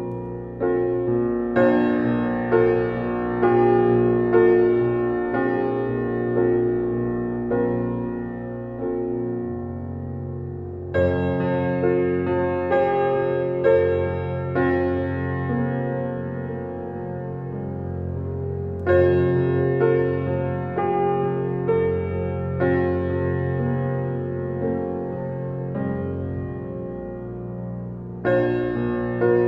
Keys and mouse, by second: 0.1 alt+click, 0.3-3.1 alt+drag, 6.4 click, 9.4 click, 11.5 ctrl+s, 12.9 click, 14.0 ctrl+alt+click, 14.4 ctrl+alt+click, 15.1 alt+click, 17.0 click, 17.4 drag, 18.2 ctrl+alt+click, 19.3 ctrl+s, 20.0 ctrl+alt+click, 20.4-22.9 alt+shift+drag, 22.7 ctrl+s, 26.8 F12.